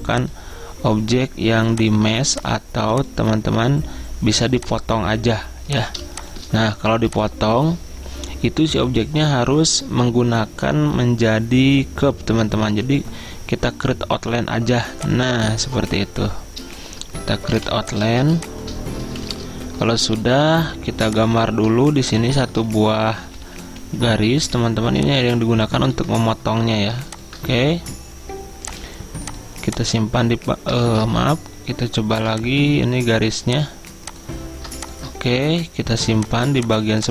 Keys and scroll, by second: 26.0 v, 30.9 ctrl+z, 32.2 v.